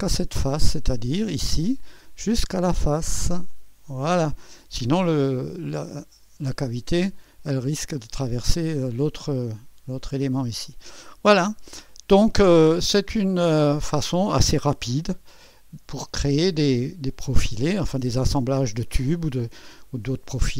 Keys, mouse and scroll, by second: 0.1 click, 1.1-2.2 drag, 2.3-3.3 drag, 3.5 right click, 4.2 click, 4.4 right click, 4.8 middle click, 5.3-8.2 drag, 6.5 typing, 7.9 typing, 9.0-10.5 scroll down 1, 10.5-13.0 scroll down 1, 13.0 click, 13.0 typing, 15.0 1, 15.6 2, 16.6-17.1 scroll up 1, 17.1-18.6 right drag, 17.1-18.2 scroll up 1.